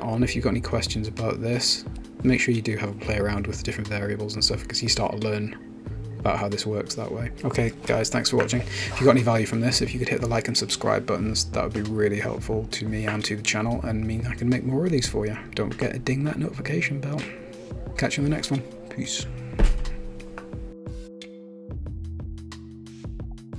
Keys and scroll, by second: 10.4 0, 12.6 Return.